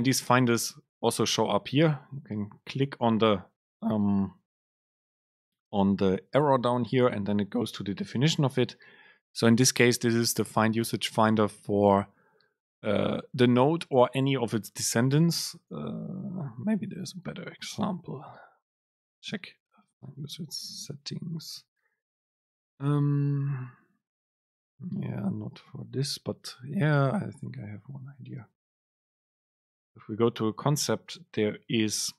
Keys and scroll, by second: 18.5 alt+F6, 21.2 ctrl+alt+shift+super+F7.